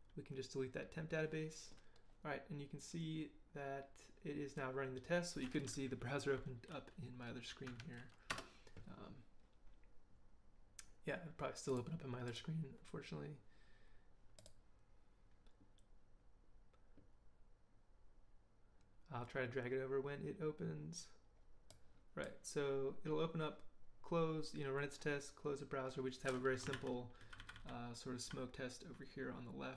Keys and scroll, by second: 7.7 Up, 8.3 Return, 26.7 ctrl+h, 27.2 ctrl+j, 27.4 ctrl+j.